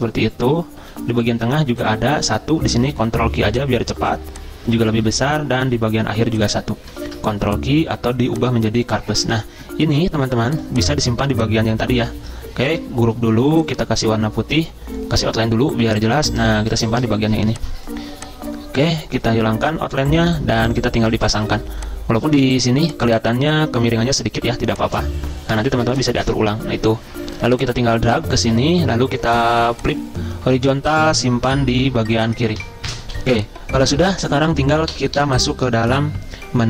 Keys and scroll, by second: 3.1 ctrl+q, 12.6 ctrl+g, 17.3 z.